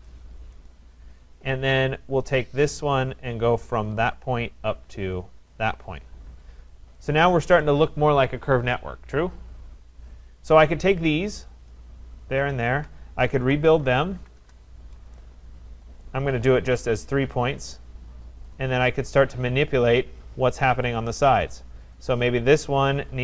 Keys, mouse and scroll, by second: 0.7 right click, 1.0-2.8 scroll, 2.8 click, 4.1 click, 5.5 click, 5.7 middle click, 6.3 Return, 7.6 right click, 11.4 click, 12.6 shift+click, 13.1-14.6 typing, 16.0 click, 16.4-17.9 typing, 18.6 click, 21.0 click, 22.1 click.